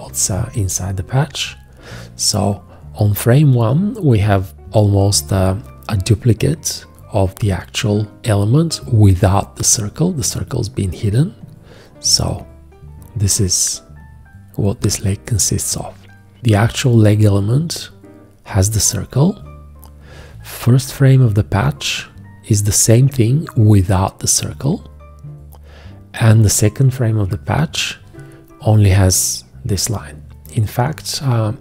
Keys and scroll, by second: 20.9 shift+,.